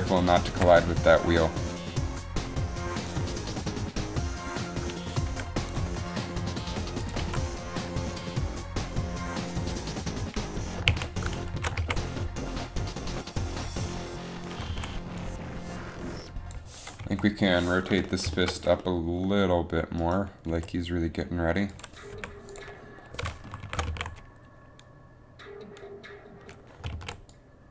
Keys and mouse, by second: 0.8 g, 1.9 g, 5.4 i, 6.0 i, 7.3 click, 7.3 alt+a, 11.1 alt+a, 11.7 shift+Left, 11.9 alt+a, 15.0 alt+a, 17.2 Up, 20.7 r, 22.2 i, 23.7 shift+Down, 23.8 shift+Left, 24.0 alt+a, 27.2 alt+a.